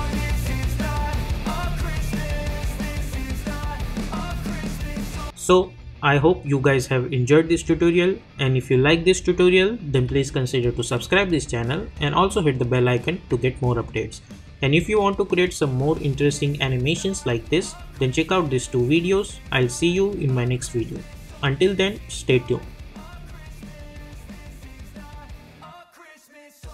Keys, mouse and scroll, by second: 0.4 n, 0.6 space, 4.7 space.